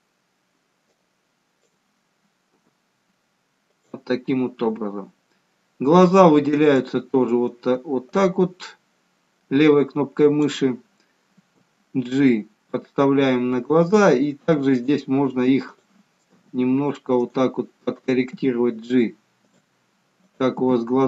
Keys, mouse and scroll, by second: 1.1 click, 2.7 g, 6.3 click, 8.2 click, 11.5 g, 14.9 click, 15.9 click, 16.5 g, 18.3 click, 18.7 g, 20.6 click.